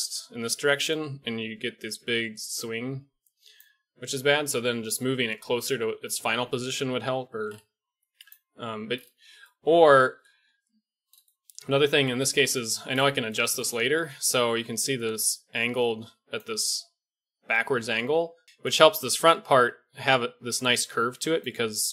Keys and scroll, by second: 12.0 KP_1, 12.2 KP_3, 14.6-19.1 d, 20.1-21.9 d.